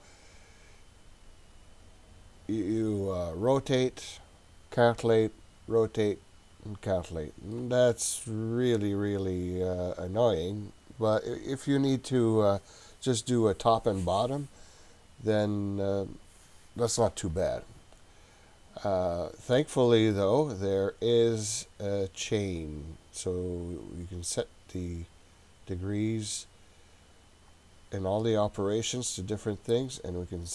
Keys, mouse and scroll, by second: 19.4 right click, 20.3 click, 21.2-23.0 scroll up 4, 24.2 click, 27.4-30.0 scroll up 5.